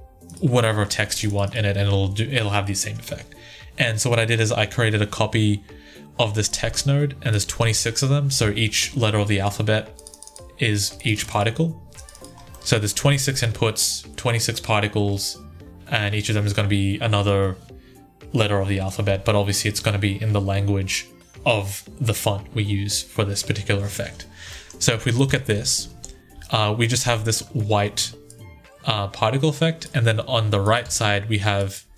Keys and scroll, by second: 25.0 1, 30.6 2, 31.7 1.